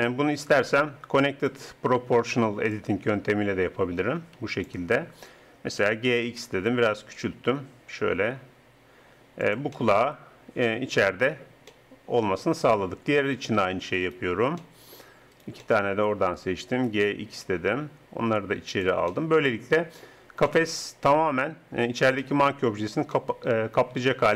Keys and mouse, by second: 0.4-2.4 drag, 2.7-4.6 drag, 5.7 g, 10.2 click, 10.6-14.0 middle drag, 14.0-16.8 drag, 16.8 g, 16.9 click, 18.7 middle click, 22.6 Tab.